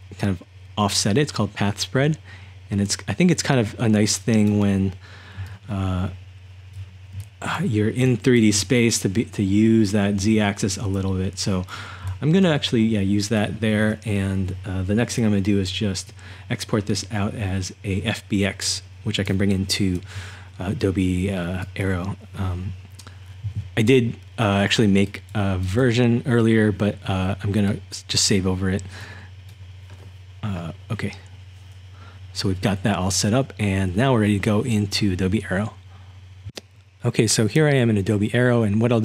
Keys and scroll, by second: 5.6-6.4 typing, 8.0-11.3 typing, 12.4-13.2 typing, 14.7 typing.